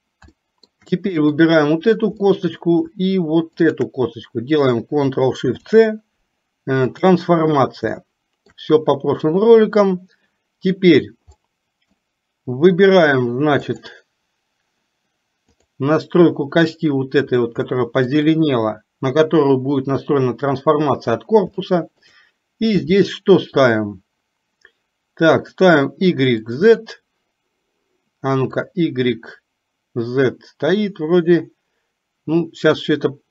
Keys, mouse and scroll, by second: 0.4-0.8 shift+middle drag, 1.4-1.8 drag, 2.3-2.7 middle drag, 5.5 ctrl+shift+c, 8.0 shift+middle click, 11.4 middle click, 13.7 click, 17.7 shift+middle click, 21.7-22.2 shift+middle drag, 25.4 click, 28.7 click.